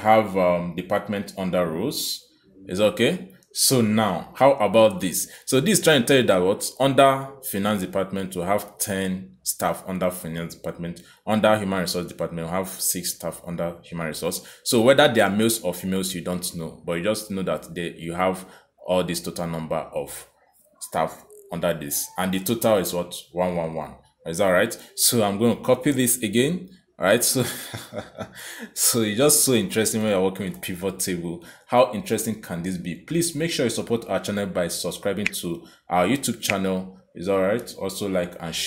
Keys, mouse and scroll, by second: 0.6 click, 3.9 click, 9.3 click, 10.7 click, 12.1 click, 17.6 click, 18.4 click, 25.2 click, 27.8 ctrl+c, 28.9 click, 30.0 ctrl+v, 30.9 Escape, 32.2 click, 38.2 click.